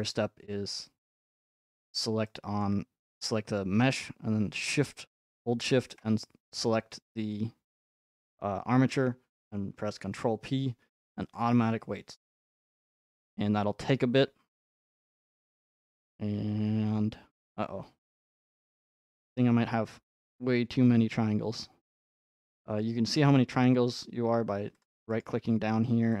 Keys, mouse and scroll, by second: 1.5 scroll up 4, 2.6 shift+middle click, 3.0 middle click, 4.7 shift+click, 7.3 middle click, 7.4 middle click, 9.3 scroll, 10.0 ctrl+p, 11.3 click, 19.8-21.5 middle drag, 19.8-21.3 scroll up 4, 21.3 scroll up 1, 22.2 middle click, 22.2 scroll up 1, 23.2-24.8 middle drag, 23.2-23.6 scroll up 1, 24.8 click, 24.8 right click, 25.2-26.2 middle drag.